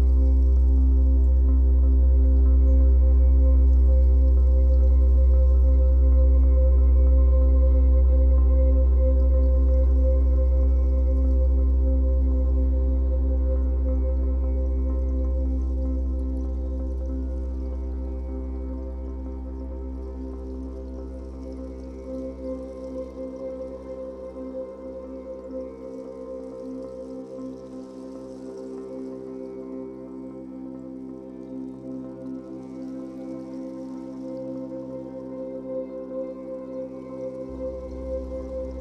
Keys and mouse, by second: 0.4 click, 1.5-4.4 typing, 4.2 Return, 6.7 click, 8.3 click, 9.2 click, 9.6 click, 10.4 typing, 11.9 shift+click, 12.1 typing, 12.9 click, 13.6-14.5 typing, 16.4-17.8 shift+drag, 17.8 ctrl+s, 20.5 1, 23.2-24.7 drag, 26.2 middle click, 26.4 right click, 27.1 click, 29.8 click, 37.9 i.